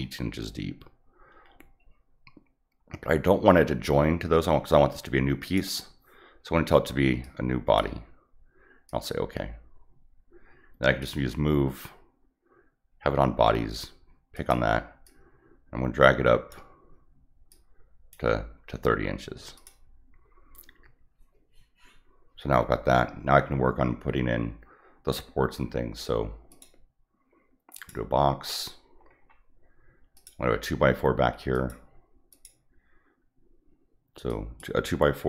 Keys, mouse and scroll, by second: 5.4 click, 7.2 click, 8.9 click, 11.0 click, 14.3 click, 15.0-16.5 drag, 17.5 click, 19.5 click, 26.5 click, 27.7 click, 28.6-29.2 scroll up 6, 30.1 click, 31.5 click, 32.3 click, 34.3 click.